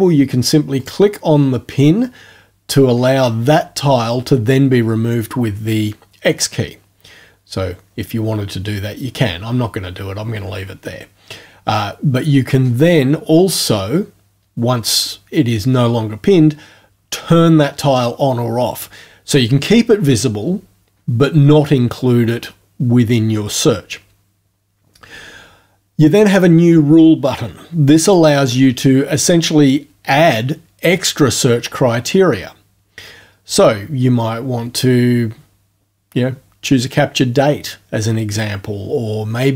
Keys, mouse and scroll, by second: 0.8 click, 28.1 click.